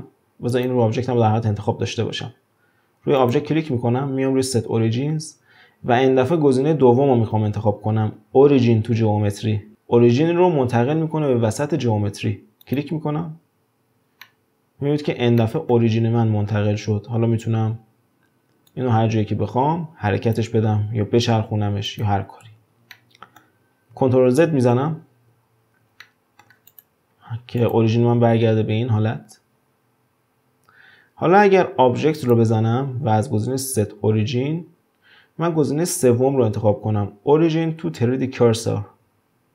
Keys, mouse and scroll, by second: 3.1-6.2 drag, 14.2-18.4 middle drag, 18.7-21.3 drag, 21.3 r, 22.5 ctrl+z, 23.0-24.3 middle drag, 24.3 ctrl+z, 24.8 ctrl+z, 26.0-26.7 shift+middle drag, 26.7 click, 27.6 click, 32.1-35.2 drag.